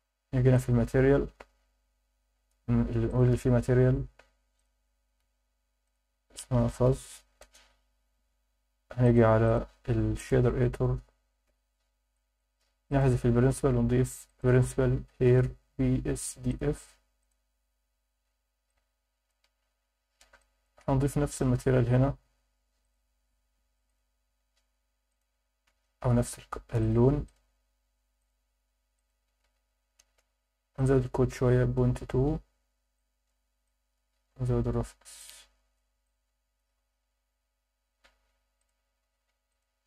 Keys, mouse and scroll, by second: 0.5 click, 1.3-1.9 scroll up 3, 2.3-3.1 scroll up 1, 3.1-3.9 drag, 4.6 click, 5.8-7.4 drag, 7.3 z, 9.0 click, 9.5-11.5 drag, 11.5 n, 12.1 alt+shift+middle click, 12.9 click, 13.1 x, 13.5 shift+a, 18.7-19.3 drag, 19.7-20.2 scroll up 3, 20.4 alt+shift+middle click, 22.0 drag, 22.8 click, 27.2 click, 28.2 click, 30.7-31.7 drag, 33.0 click, 33.6 click, 35.2 click, 36.0 click, 38.6-39.8 drag.